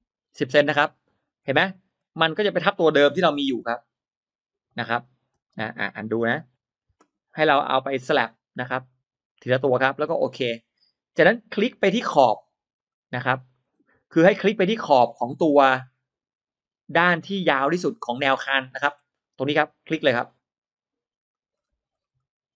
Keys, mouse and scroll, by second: 0.9-1.3 scroll up 1, 1.3 middle click, 1.9 space, 2.3 click, 3.3 m, 3.4 click, 5.2 space, 5.9 ctrl+middle click, 6.5 ctrl+z, 7.8 click, 9.1 click, 10.3 click, 11.6 middle click, 12.7 click, 13.3 space, 14.7 click, 15.6-16.5 drag, 17.1 click, 17.9 click, 18.6 scroll up 1, 18.7 middle click, 18.8 scroll down 1, 20.1 click, 21.2 click, 21.5-21.8 scroll down 1, 22.0 scroll up 1.